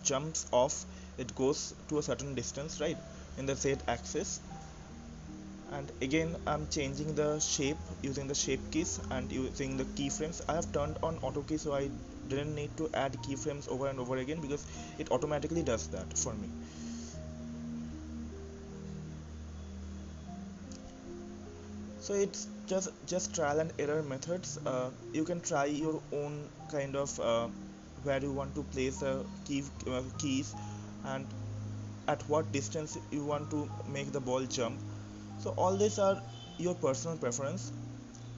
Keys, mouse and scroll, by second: 0.7-2.2 shift+middle drag, 2.2 click, 8.9 click, 11.5-18.3 drag, 19.4-32.4 drag.